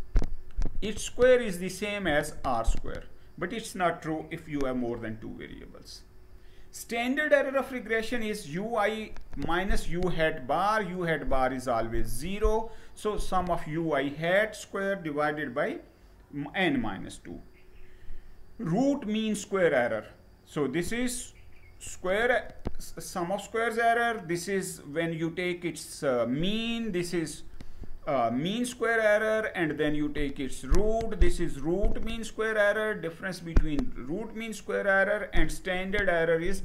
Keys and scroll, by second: 4.9 Page_Down, 16.6 Down.